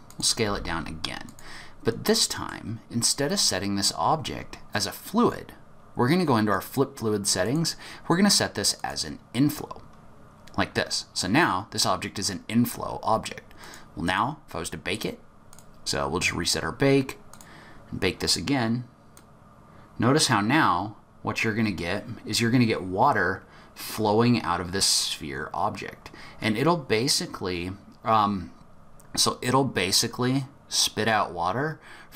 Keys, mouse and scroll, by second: 0.4 g, 2.1 middle click, 6.5 click, 7.4 click, 13.6 click, 14.0 click, 15.5 click, 17.3 click, 19.1 click.